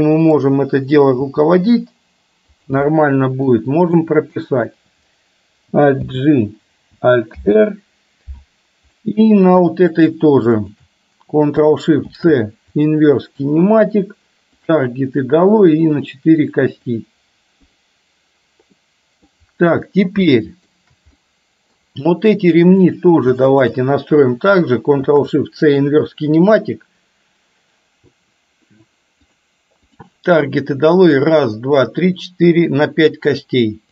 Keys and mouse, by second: 1.4 g, 2.9-3.5 middle drag, 4.0 middle click, 6.0 alt+g, 7.4 alt+r, 9.0 middle click, 9.9 click, 12.2 ctrl+shift+c, 14.7 click, 16.0 click, 16.5 click, 16.9 click, 19.0 middle click, 20.0 middle click, 20.4-20.8 shift+middle drag, 21.3-21.8 middle drag, 23.0 drag, 23.7 shift+drag, 25.9 ctrl+shift+c, 29.4 click, 29.9 click.